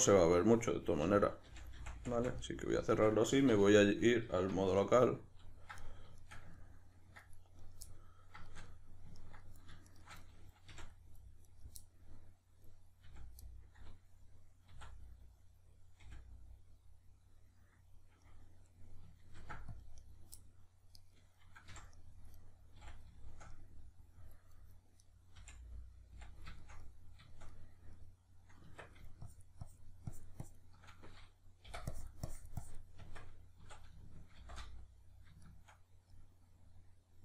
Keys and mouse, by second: 0.2 right click, 1.0 f, 2.4-7.6 middle drag, 3.5 q, 4.7 \, 7.6 right click, 7.9-9.9 middle drag, 9.9 shift+right click, 10.2-11.5 middle drag, 10.7 f, 11.5 right click, 11.8-21.0 middle drag, 13.0 f, 14.7 d, 16.0 f, 19.4 ctrl+r, 20.1 right click, 21.0 right click, 21.7 f, 22.0-22.4 middle drag, 22.4 right click, 22.8 f, 23.2-25.0 shift+middle drag, 25.0 right click, 25.4 f, 26.6-29.2 shift+middle drag, 28.7 Tab, 29.2-35.4 shift+drag, 33.0 Tab, 35.4-37.2 shift+middle drag.